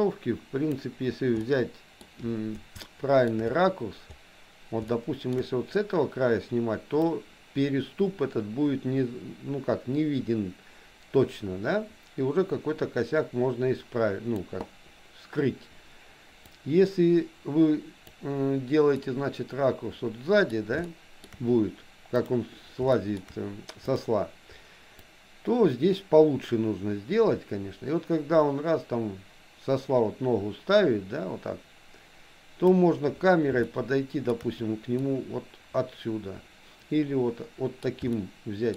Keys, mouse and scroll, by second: 1.4 middle click, 2.9 shift+middle click, 4.9 shift+middle click, 7.1-14.5 drag, 16.6-18.2 drag, 19.0-20.5 middle drag, 20.9 shift+middle click, 22.2 click, 23.0 shift+middle click, 25.1-32.9 drag, 33.6 shift+middle click, 35.0-37.9 middle drag, 38.1 shift+middle click.